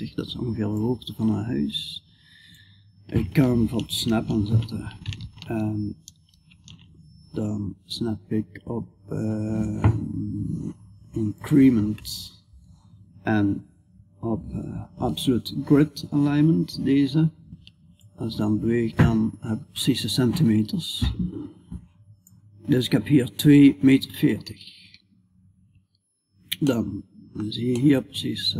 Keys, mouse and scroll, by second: 0.2-2.0 drag, 3.5 shift+Tab, 5.7 ctrl+shift+Tab, 17.4-21.7 drag, 26.1-28.5 middle drag.